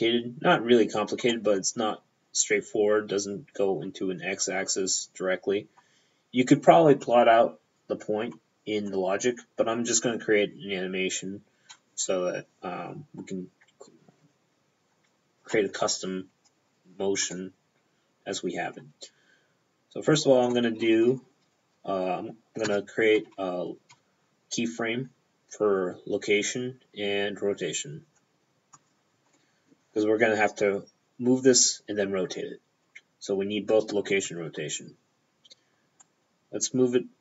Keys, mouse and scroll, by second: 1.4 middle click, 1.6 p, 17.4 middle click, 18.4 p, 20.6 middle click, 20.9 p, 22.7 i, 22.8 p, 28.8 click, 29.4 middle click, 29.8 p, 36.1 click.